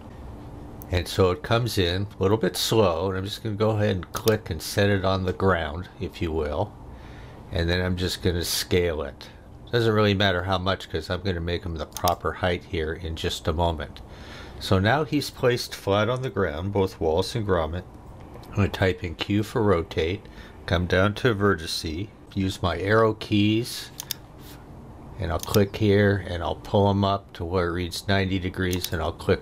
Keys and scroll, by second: 22.5 Right.